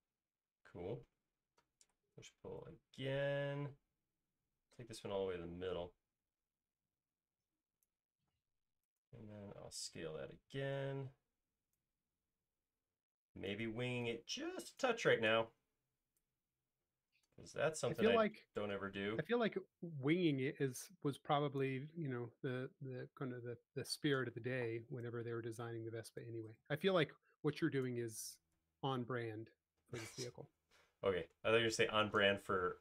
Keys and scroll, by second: 2.1 p, 8.6 space, 10.8 s, 22.2 space, 25.1 s, 28.5 space.